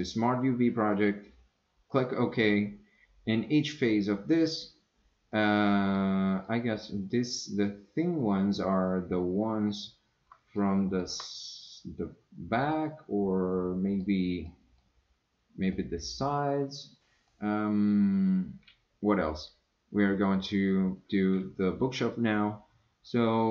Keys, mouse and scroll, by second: 5.5 middle click, 6.4 middle click, 10.6-11.0 shift+middle drag, 12.6-14.0 middle drag, 14.5 scroll down 1, 14.7 middle click, 15.7-17.0 middle drag, 17.3 scroll down 1, 17.3 middle click.